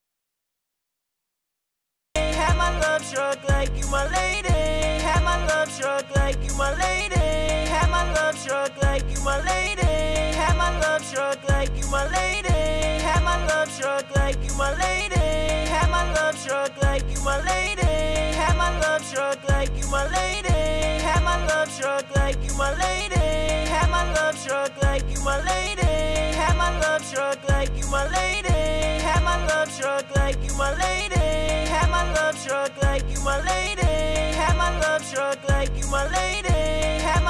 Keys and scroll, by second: 25.0-26.1 typing, 32.8-33.9 typing, 35.3-36.3 typing, 36.9 super+s.